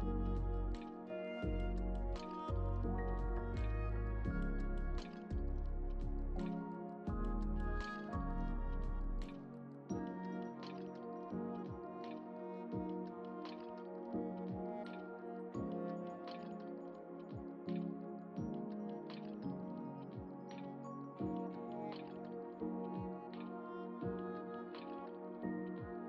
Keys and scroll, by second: 4.8 ctrl+j, 16.3 Delete, 17.6 ctrl+d, 24.0 ctrl+t.